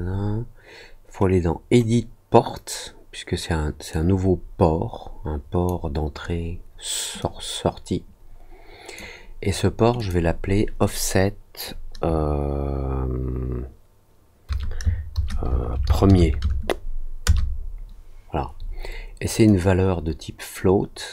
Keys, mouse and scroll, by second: 3.8 click, 7.1-8.9 drag, 9.9 click, 19.4-21.1 drag.